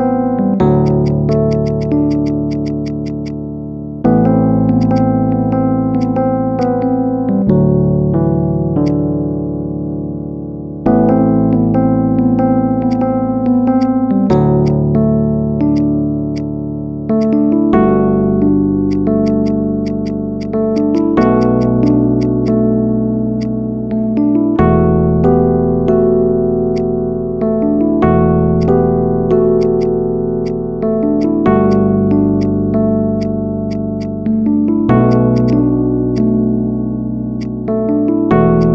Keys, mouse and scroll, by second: 0.0 Tab, 0.2-0.6 middle drag, 0.6 click, 0.9 shift+click, 1.2 shift+click, 1.4 shift+click, 1.5 shift+click, 1.6 shift+drag, 2.1 shift+drag, 2.4 shift+click, 2.5 shift+click, 2.7 shift+click, 2.9 shift+click, 3.1 shift+click, 3.6 p, 4.4 Tab, 4.6 click, 4.8 click, 5.6 Delete, 5.8 click, 6.4 click, 6.6-7.2 middle drag, 7.2 KP_1, 7.8 g, 8.8-9.6 middle drag, 9.6 Tab, 10.4 a, 10.7 middle click, 11.2 KP_1, 11.6 shift+middle drag, 11.8-12.4 scroll up 3, 12.4 w, 12.5 e, 13.6 click, 14.2-14.6 right drag, 14.6-15.3 drag, 15.3 middle click, 15.6-16.8 right drag, 16.8 Tab, 17.0-17.6 right drag, 17.6-18.0 middle drag, 18.0 Tab, 18.2 scroll down 2, 18.4 middle click, 18.8-22.3 drag, 22.3 right click, 23.2 click, 23.6-24.2 middle drag, 24.2 KP_1, 24.9 e, 26.8-27.3 middle drag, 27.3 scroll up 1, 27.6-28.4 shift+middle drag, 28.4-29.5 drag, 29.6 alt+shift+click, 31.0-31.6 drag, 32.2 click, 33.0 right click, 33.8-35.0 drag, 35.2 alt+shift+click, 36.0 alt+shift+click, 36.3-37.2 middle drag, 37.2 alt+shift+click, 37.6-38.4 middle drag, 38.4 alt+shift+click.